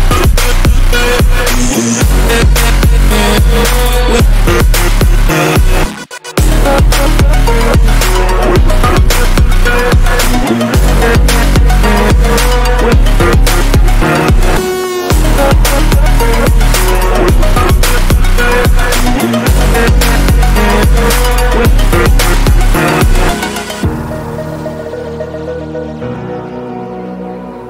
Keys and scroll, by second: 9.6 ctrl+g, 11.1-12.2 typing, 24.2 ctrl+o.